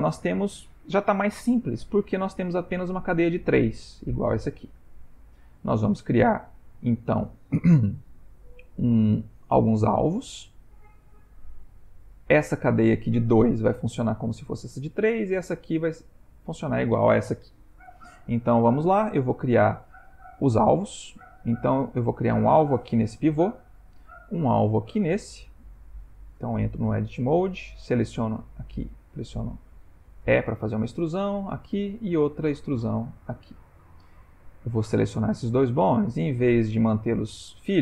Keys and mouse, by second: 20.1 shift+middle click, 20.8 ctrl+middle click, 26.1 Tab, 26.6 click, 27.6 click, 28.7 e, 31.3 click, 31.9 e, 33.8 click, 35.1 shift+click, 35.7 g.